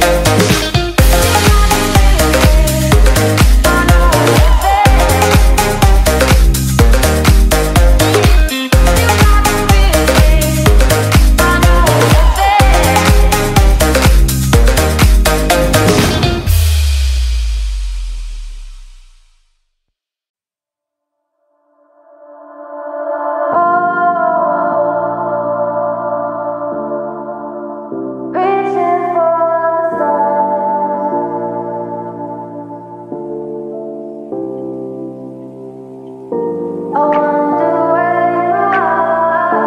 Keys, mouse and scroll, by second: 0.5 Return, 1.7 click, 3.7-6.1 typing, 7.3 click, 10.0-11.5 typing, 15.6 F10, 16.0 right click, 17.0 click, 17.8-19.5 typing, 20.1 Return, 20.9 click, 23.0 right click, 23.1 F10, 23.6 click, 24.2-26.4 typing, 27.1-31.3 drag, 32.4-34.2 typing, 34.7 Return, 35.5 right click, 36.3-39.6 drag.